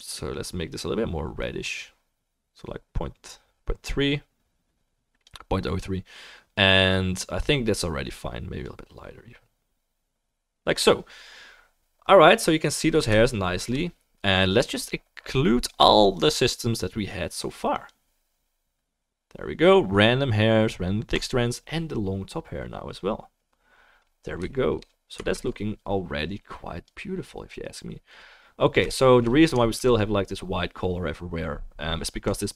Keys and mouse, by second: 14.6 click, 25.7 ctrl+s, 26.3-32.4 drag, 29.8 ctrl+s, 32.4-32.5 middle drag.